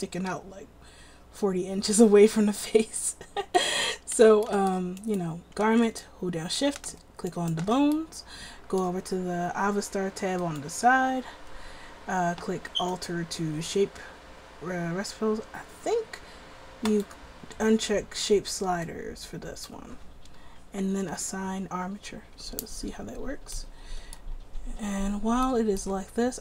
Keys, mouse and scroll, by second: 5.2-22.6 right drag, 24.3-25.7 middle drag.